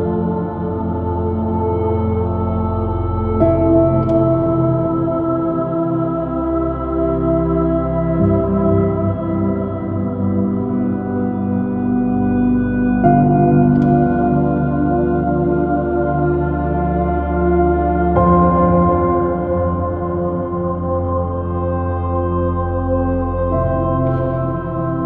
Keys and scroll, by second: 2.1 b, 15.4 space, 17.5 super+|, 17.6 super+-, 18.5 super+i, 18.7 super++, 18.8 super+space, 20.0 space, 21.6 j, 22.6 b, 23.3 j, 23.7 super+z, 24.1 super+z.